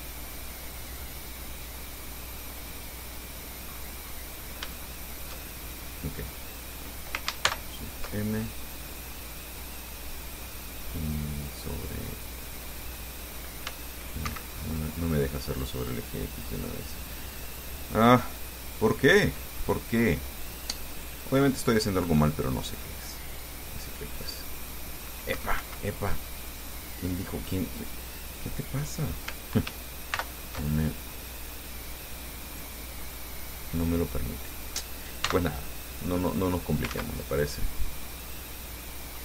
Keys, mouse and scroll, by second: 1.1 click, 2.3-2.6 scroll down 2, 3.6 scroll down 2, 3.9-4.2 scroll up 2, 4.9 shift+click, 5.8 shift+right click, 7.7 ctrl+shift+m, 13.9 x, 14.5 Escape, 15.4 right click, 18.2 click, 21.2 click, 24.3-25.6 right drag, 25.6 Escape, 26.8 right click, 30.3 ctrl+shift+m, 31.5-33.0 drag, 33.2-33.5 scroll down 2, 33.5-35.1 drag, 35.5 x, 35.6 click, 36.7 right click, 37.2 ctrl+z, 37.6 ctrl+click, 38.5-39.2 drag.